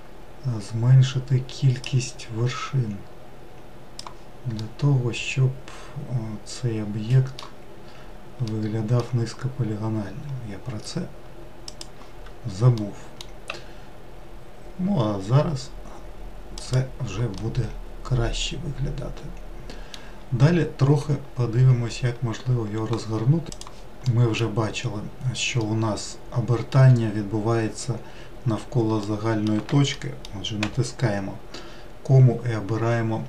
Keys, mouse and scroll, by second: 1.9-4.6 drag, 4.6-7.7 middle drag, 8.5-11.6 middle drag, 11.7-12.8 drag, 12.8 middle click, 13.5 s, 17.4-20.6 middle drag, 23.8-25.0 middle drag, 25.0-25.8 scroll up 2, 25.8-28.1 middle drag, 28.1-28.4 scroll down 2, 29.2-30.9 middle drag, 30.9 ,.